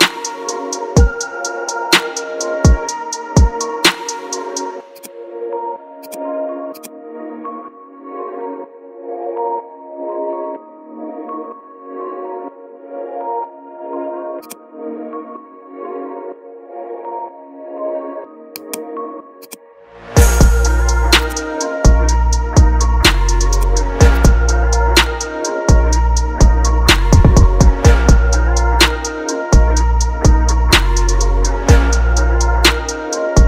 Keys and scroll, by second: 11.0 ctrl+alt+g, 12.7 ctrl+z, 17.5 ctrl+t, 22.6 ctrl+t.